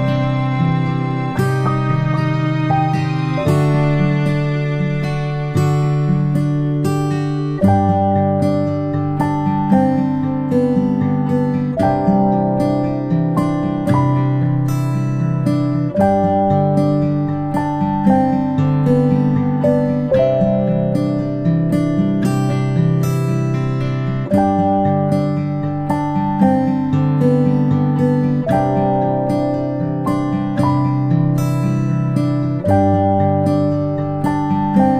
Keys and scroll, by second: 1.6 ctrl+shift+[, 1.9 ctrl+shift+], 2.2 ctrl+shift+[, 2.6 ctrl+], 5.4 ctrl+], 5.6 ctrl+], 15.2-15.6 ctrl+space, 18.9 p, 34.4 ctrl+space, 34.7 ctrl+space, 34.8 ctrl+space.